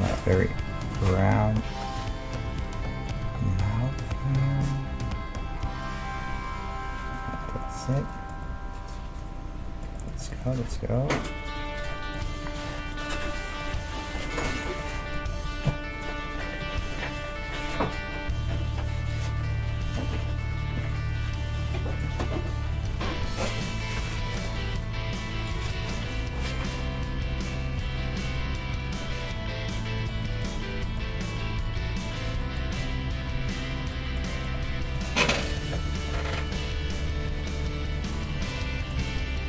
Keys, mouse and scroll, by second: 0.9 g, 3.1-6.5 right drag, 4.9 g, 7.8-17.2 middle drag, 12.4-16.0 right drag, 16.6 KP_3, 17.5-19.5 middle drag, 20.0 e, 22.0-25.8 right drag, 22.2 g, 23.2 g, 24.6 g, 26.3 e, 28.4 e, 30.2-32.4 middle drag, 31.3-32.4 right drag, 32.8 e, 33.4 right click, 33.7-37.5 middle drag, 34.6 g, 35.8 ctrl+Tab, 36.8 click, 37.3-38.7 right drag, 38.5 f, 38.7 middle click, 39.0 ctrl+Tab.